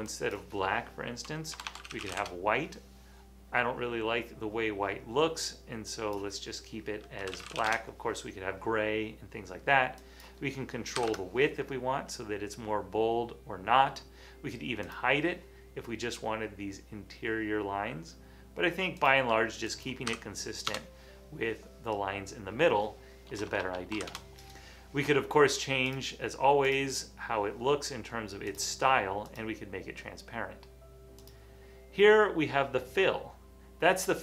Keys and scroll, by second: 1.3-2.6 typing, 5.3 typing, 7.1-8.1 typing, 11.1 typing, 20.2 2, 20.7 Return, 23.3-24.0 typing, 24.1 Return, 26.5 typing.